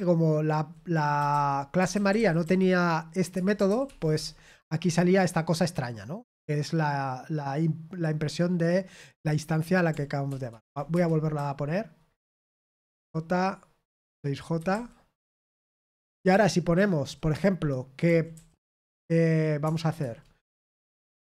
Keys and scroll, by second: 0.0-2.9 typing, 3.6 ctrl+p, 3.8 ctrl+p, 4.1 Return, 10.2 ctrl+p, 10.4 ctrl+p, 10.9 Return, 11.3-13.4 typing, 16.9 typing, 19.9 Return.